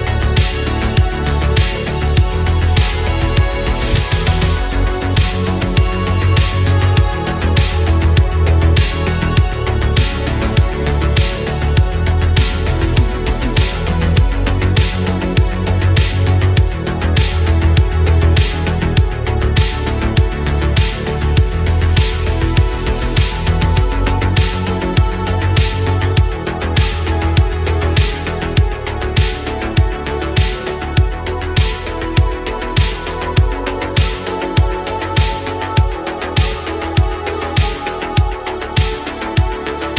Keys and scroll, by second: 0.7 ctrl+z, 0.9 ctrl+z, 1.8 ctrl+z, 2.2 ctrl+z, 2.9 ctrl+z, 3.4 ctrl+z, 4.0 ctrl+z, 8.4 space, 9.2 space, 10.6 space, 10.9 ctrl+z, 18.5 space, 22.8 space.